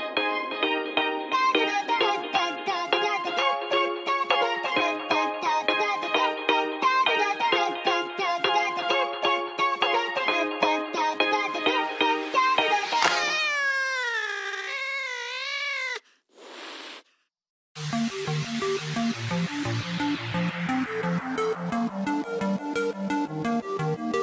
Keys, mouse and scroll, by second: 1.0 click, 2.5 click, 8.5 middle click, 10.2 middle click, 12.5 click, 14.6 super+click, 15.7 super+click, 18.6 click, 20.6 click, 20.6 middle click, 22.6 scroll down 2.